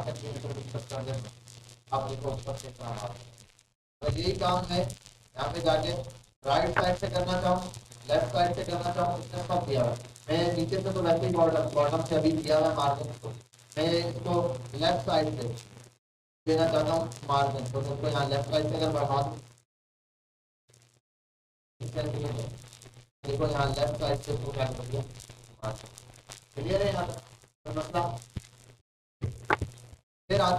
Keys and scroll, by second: 4.3 ctrl+z.